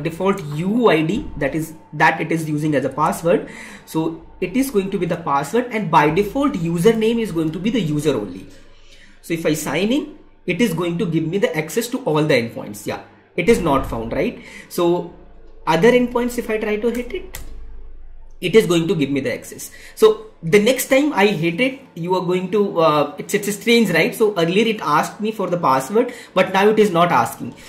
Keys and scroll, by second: 2.9 alt+Tab, 4.8 ctrl+v, 16.2 Right.